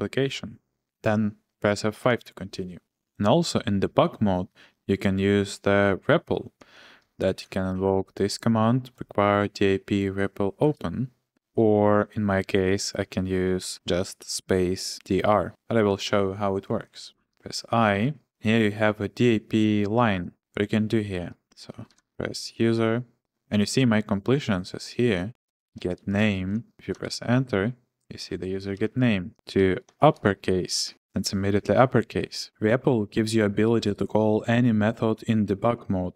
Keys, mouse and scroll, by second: 2.0 F5, 6.6 click, 6.7-7.3 scroll, 7.7 ctrl+shift+v, 13.0 Return, 16.9-17.8 typing, 21.1-22.5 typing, 25.3-27.1 typing, 29.1-32.2 typing, 30.7 Tab, 30.9 Return.